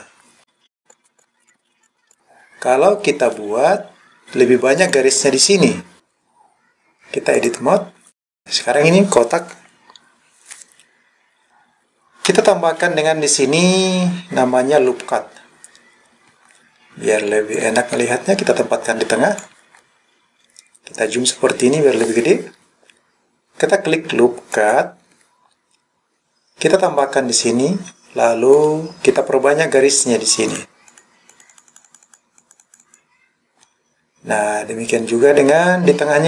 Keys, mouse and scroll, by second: 0.7 click, 1.2 click, 2.1 click, 4.8 click, 6.0-7.5 drag, 6.0-6.6 scroll up 1, 17.6-19.4 drag, 20.0-21.6 scroll up 4, 21.6-22.4 scroll down 1, 24.5 click, 26.9 click, 28.7 click, 30.5 click, 30.9 click, 31.3 click, 31.5 click, 31.7 click, 31.9 click, 32.4 click, 32.6 click, 32.8 click.